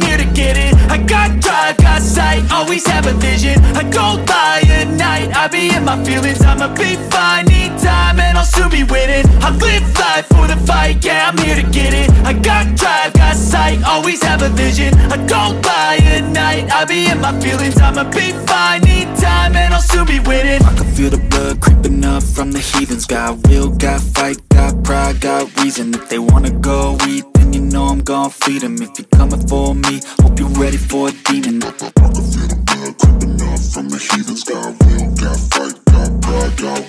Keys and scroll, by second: 6.8 space, 11.5 ctrl+z, 29.3 space.